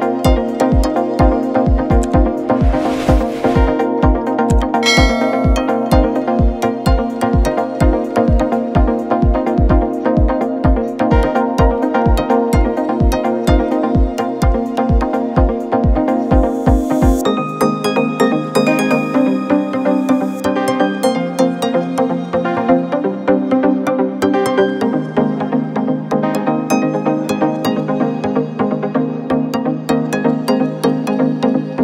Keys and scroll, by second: 1.6 v, 5.5 ctrl+t, 9.7 Return, 13.8 ctrl+alt+t, 19.3 Left, 19.4 Left, 19.5 Left, 19.7 Left, 19.9 Left, 20.7 Up, 20.9 Up, 21.1 Up, 22.0 Right, 22.2 Right, 22.4 Right, 22.6 Return, 24.0 u.